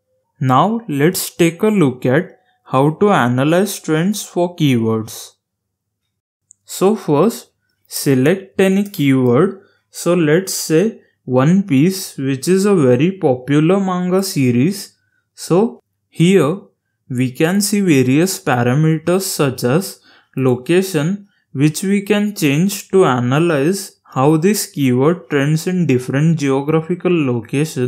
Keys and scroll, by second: 6.4-9.3 typing.